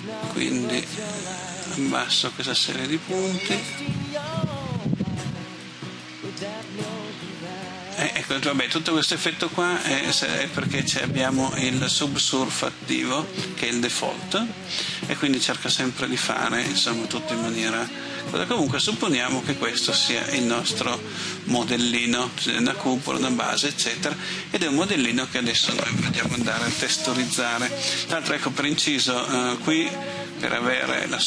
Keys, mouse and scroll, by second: 17.5-23.4 middle drag, 26.8 middle click, 30.8 click.